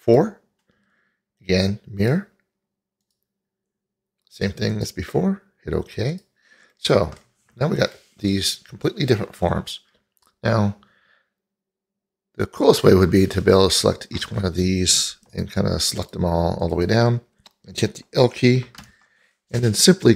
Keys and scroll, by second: 18.8 l.